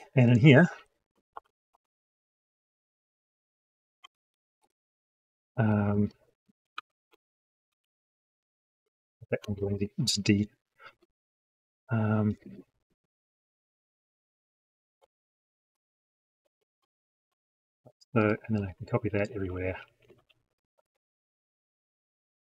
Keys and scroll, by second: 17.1 ctrl+c, 18.4 ctrl+v.